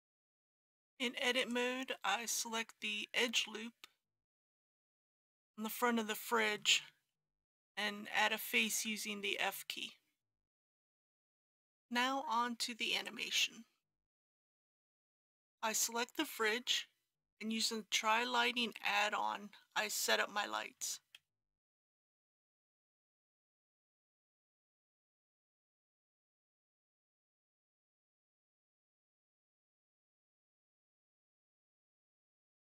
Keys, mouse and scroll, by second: 1.3 alt+click, 2.6 scroll up 1, 4.5 scroll down 1, 7.0 f, 8.6 alt+a, 9.5 middle click, 11.2-14.8 scroll down 1, 15.0 middle click, 19.7 middle click, 21.1 shift+a, 24.8 click, 31.8 KP_5, 32.0 KP_0, 32.5 click.